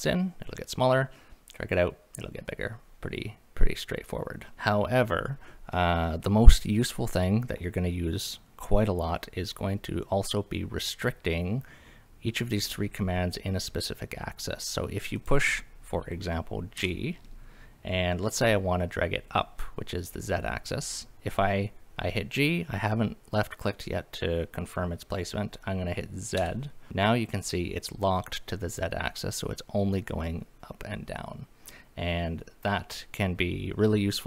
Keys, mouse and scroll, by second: 15.2 click, 16.8 g, 26.4 z.